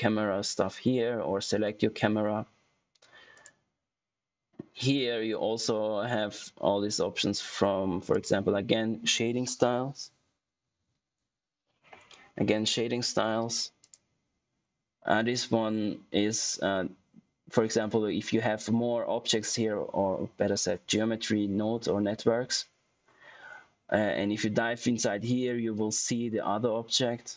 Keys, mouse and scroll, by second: 3.3 click, 3.3 typing, 8.0 click, 13.7 click.